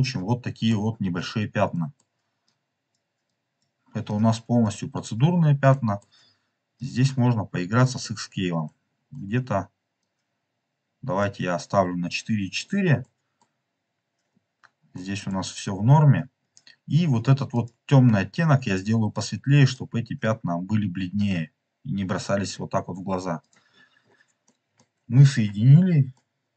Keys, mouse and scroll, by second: 1.1-1.6 scroll down 4, 1.6 middle click, 1.8 click, 1.9 middle click, 2.4 click, 4.5 click, 4.9-5.5 scroll up 3, 5.6 scroll up 1, 5.6 middle click, 6.2-6.6 scroll up 1, 6.7 click, 7.9-8.3 scroll up 3, 8.5-9.1 middle drag, 9.9-11.2 drag, 12.4 click, 12.5 scroll down 2, 12.9 middle click, 14.2 scroll down 2, 14.8 middle click, 16.3 scroll up 2, 17.4 click, 18.5 click, 23.3 click, 23.6-23.9 scroll down 2, 23.9 middle click, 24.4 middle click, 26.0 middle click, 26.4 middle click.